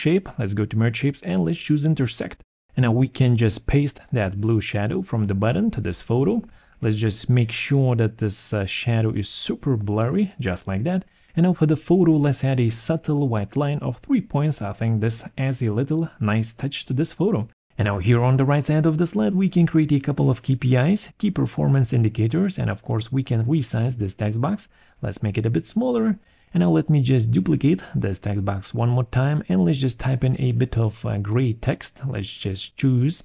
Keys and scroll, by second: 3.0 ctrl+shift+v, 8.5 ctrl+shift+c, 14.5 Return, 17.6 ctrl+a, 18.4 0, 19.1 shift+k, 19.8 shift+=, 20.6 shift+Left, 23.9 ctrl+a, 24.6 ctrl+shift+,, 26.1 ctrl+shift+., 26.4 ctrl+shift+,.